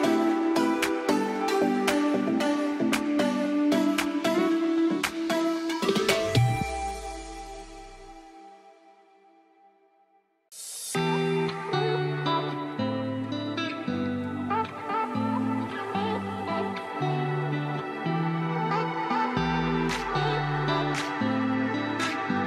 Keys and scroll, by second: 0.2 F4, 0.5 Escape, 1.4 F4, 2.0 alt+v, 4.7 alt+v, 5.3 shift+F2, 5.7 shift+Page_Up, 6.1 F3, 7.5 Escape, 10.9 alt+c, 11.5 Escape, 12.1 F3, 12.3 Escape, 14.5 shift+F2, 18.5 5, 18.7 Return.